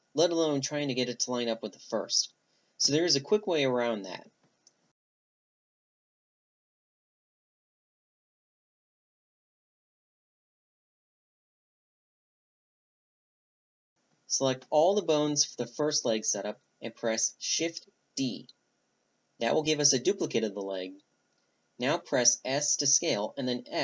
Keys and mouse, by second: 5.2 a, 6.1-7.1 drag, 7.3 click, 8.0 shift+c, 9.8 click, 9.8 right click, 10.4 Tab, 12.5 b, 12.6-13.0 right drag, 13.5 b, 15.1-17.9 middle drag, 18.8 drag, 20.7 click, 21.9 shift+d.